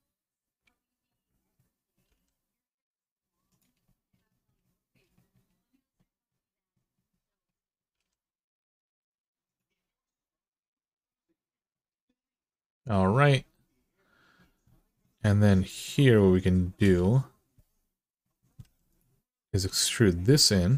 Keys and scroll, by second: 1.8 g, 7.7 g, 18.4 2, 20.5 e.